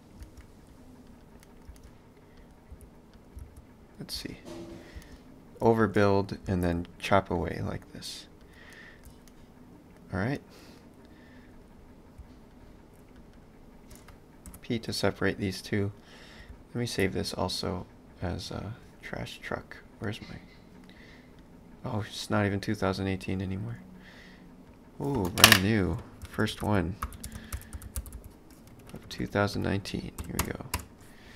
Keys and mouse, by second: 0.2 space, 1.1 click, 1.4 middle click, 1.7 space, 2.7 s, 3.4 space, 6.1 middle click, 6.5 space, 8.8 shift+middle click, 12.6 shift+click, 14.6 p, 15.2 click, 16.6 ctrl+s.